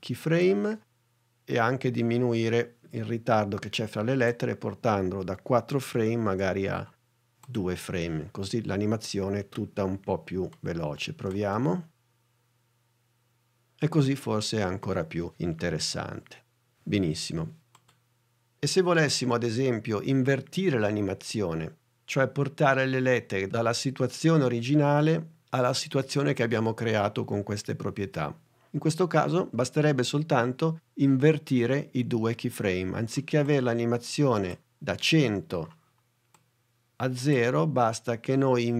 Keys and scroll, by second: 11.3 space.